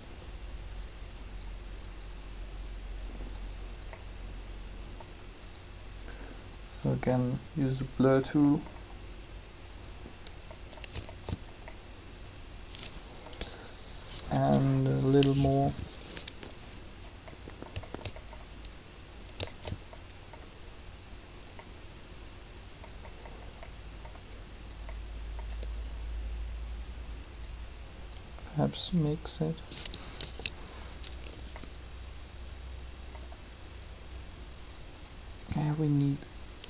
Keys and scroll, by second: 14.1 3, 30.2 ctrl+z.